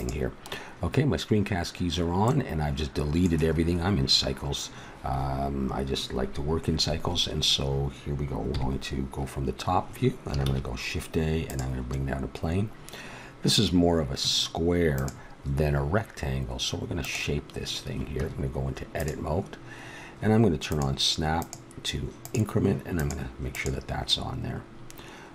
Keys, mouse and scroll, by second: 2.2-6.3 middle drag, 8.5 KP_7, 10.4 shift+a, 18.1 Tab, 20.6-25.3 drag.